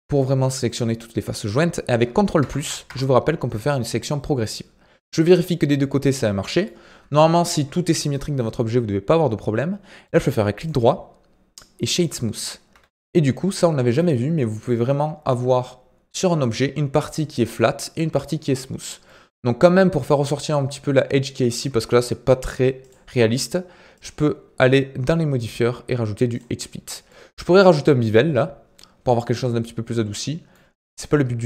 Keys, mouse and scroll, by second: 2.4 ctrl+KP_Add, 2.8 ctrl+KP_Add, 4.2-23.5 middle drag, 23.9-26.9 drag, 27.1-31.4 middle drag.